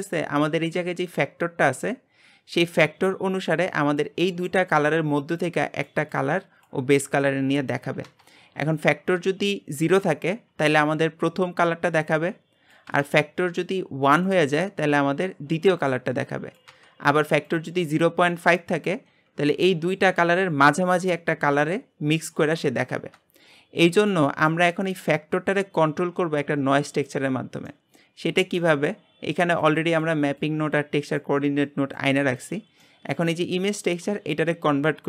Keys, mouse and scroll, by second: 9.3-35.0 drag.